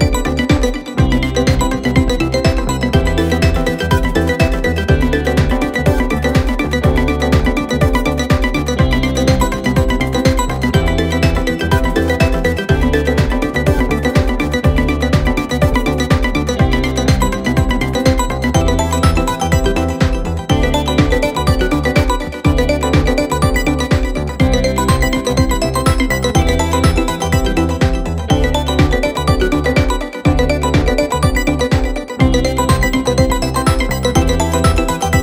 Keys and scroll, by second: 7.4 ], 10.6 ], 13.0 4, 14.4 3, 15.0 ], 18.9 ], 21.7 4, 23.8 3, 32.8 Escape.